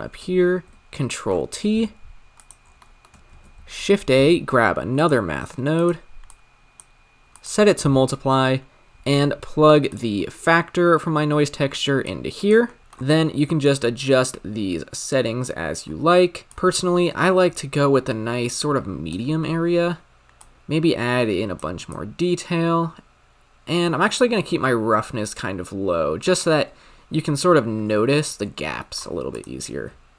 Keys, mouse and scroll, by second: 0.5 ctrl+t, 5.0 shift+a, 6.3 click, 7.3-8.1 drag, 8.1 middle click, 8.4-9.5 scroll up 3, 9.5-9.8 scroll up 2, 9.8-12.1 drag, 12.3 click, 12.8-19.4 drag, 19.4-20.1 scroll up 3, 20.1 scroll up 2, 20.4-24.9 drag, 28.0-28.5 scroll down 10, 28.5-29.0 scroll down 8, 29.0 scroll up 5, 29.3 click.